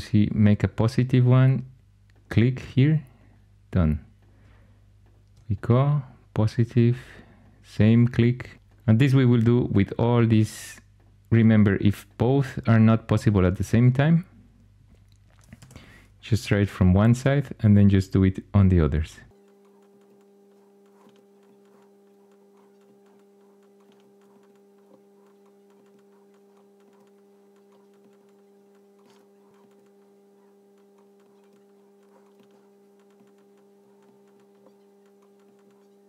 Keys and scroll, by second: 15.4 Escape.